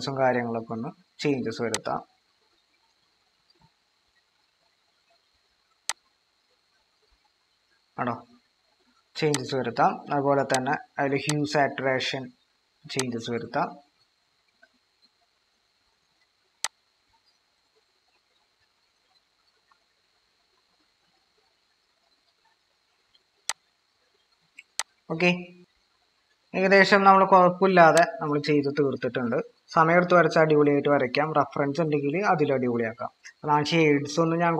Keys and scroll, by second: 25.6 ctrl+-.